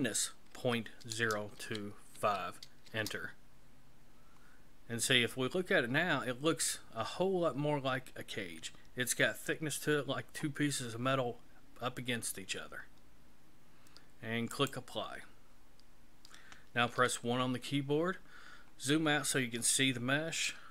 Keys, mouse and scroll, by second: 5.1 middle click, 14.6 click, 17.0 KP_1, 18.4-19.3 scroll down 10, 19.8 scroll down 2, 20.5 shift+middle click.